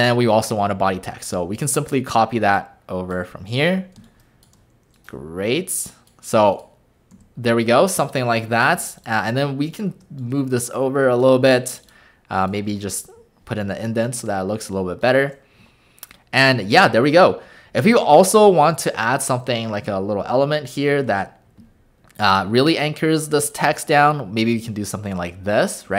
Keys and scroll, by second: 4.0 space, 7.2 w, 12.7 Return.